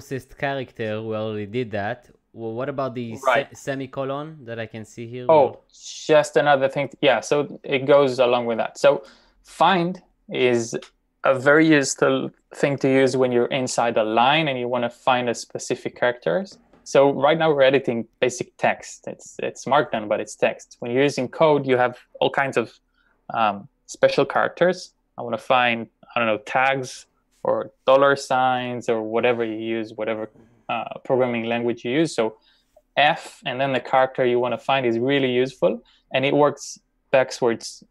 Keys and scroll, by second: 33.1 f, 33.7 c.